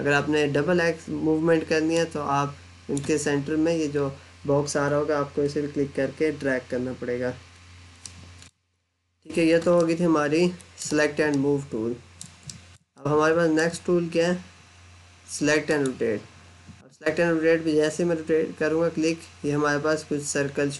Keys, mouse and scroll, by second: 1.8 click, 7.9 middle click, 8.6-9.6 scroll down 1, 9.6 alt+middle click, 11.0 scroll up 1, 11.2 alt+middle click, 12.3 middle click, 15.5 click.